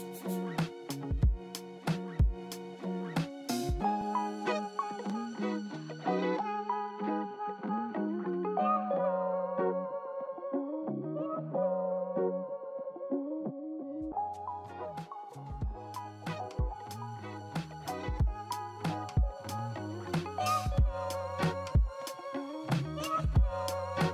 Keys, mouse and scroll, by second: 8.1 right click, 17.4-18.0 scroll up 3, 19.0 middle click, 19.1 scroll down 2, 19.7 scroll down 2, 20.7-21.0 scroll up 2, 21.6-22.2 scroll down 3, 22.5 alt+middle click, 23.2 alt+middle click.